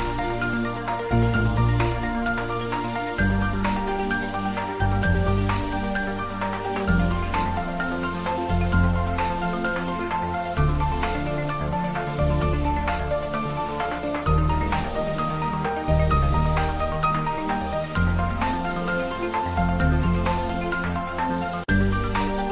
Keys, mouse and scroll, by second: 0.1 shift+z, 0.7 ctrl+middle click, 1.2 click, 2.0 g, 2.3 Down, 3.6 Return, 3.8 ctrl+s, 5.2 click, 5.2 click, 5.5 ctrl+middle click, 6.6-8.0 drag, 8.1 shift+click, 13.4 g, 15.4 z, 16.0 click, 17.0 s, 17.8 click, 18.9 alt+h, 19.6 click, 20.7 shift+middle click, 21.5-22.5 ctrl+middle drag.